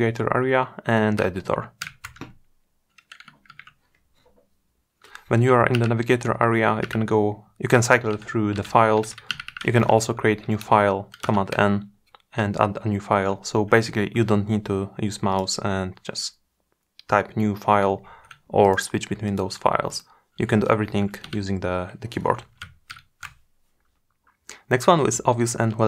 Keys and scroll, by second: 11.6 super+n.